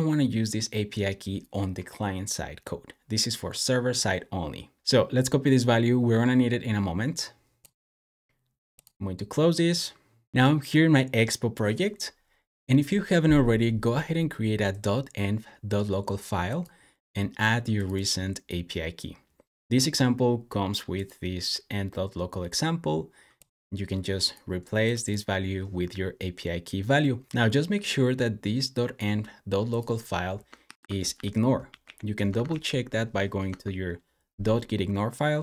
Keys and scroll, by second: 30.5 super+p, 31.4-32.8 typing, 33.3 Return.